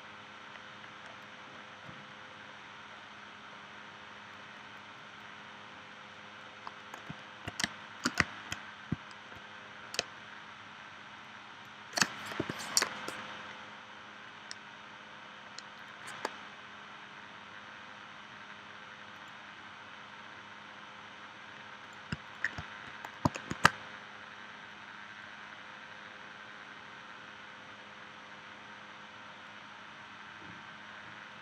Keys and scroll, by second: 7.6 space, 10.0 space, 12.4 p, 23.5 shift+c.